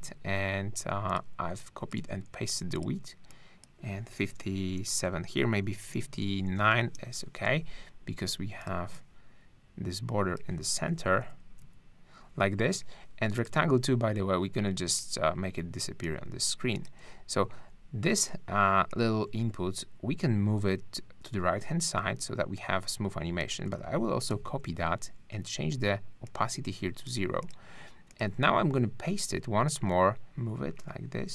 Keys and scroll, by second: 2.1 super+v, 4.9 5, 6.4 9, 6.8 Return, 11.0 Up, 11.4 Left, 11.6 Down, 24.3 shift+super+c, 28.4 super+v.